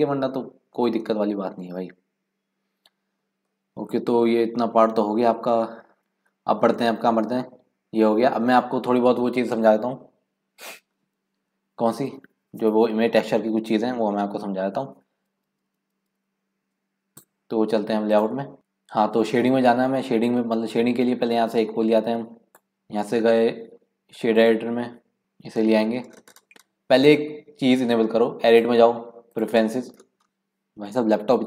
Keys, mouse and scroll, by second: 1.5 scroll down 3, 1.9 scroll up 4, 2.4-3.6 scroll down 2, 3.6-6.0 middle drag, 24.7-31.4 drag.